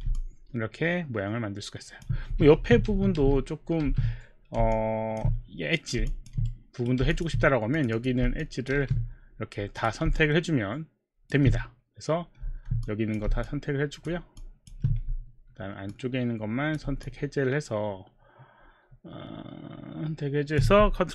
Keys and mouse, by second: 0.2 alt+click, 2.3 z, 2.5 z, 2.8 z, 4.1 z, 4.7 alt+z, 4.7 alt+click, 6.1 alt+click, 6.5 right click, 7.3 alt+click, 7.8 alt+click, 8.0 click, 8.9 q, 10.5 alt+click, 12.8 click, 15.9 ctrl+click, 17.0 alt+click, 17.5 alt+click.